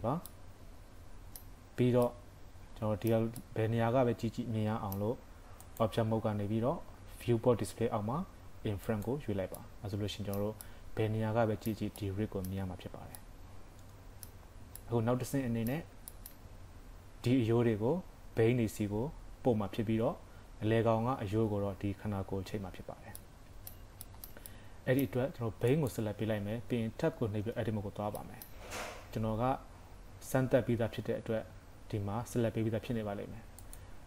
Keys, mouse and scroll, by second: 0.3 middle click, 5.7 click, 8.9 click, 9.6 middle click, 10.7 middle click, 12.9-13.4 scroll up 2, 13.2 middle click, 14.5-15.0 scroll down 2, 14.9 middle click, 15.9 scroll up 1, 16.2 shift+middle click, 22.9 scroll up 3, 23.2 middle click, 24.1 shift+middle click, 24.5 middle click, 25.8 click, 27.4 Tab, 28.2 middle click, 33.6 click.